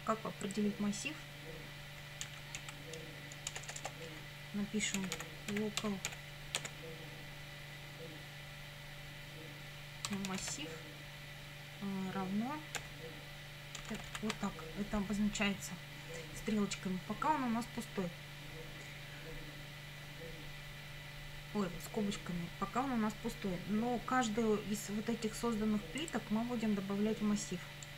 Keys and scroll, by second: 2.3 Down, 3.5 Return, 4.1 Up, 4.8-6.6 typing, 9.8-10.8 typing, 12.8 =, 13.9 shift+[, 14.0 shift+].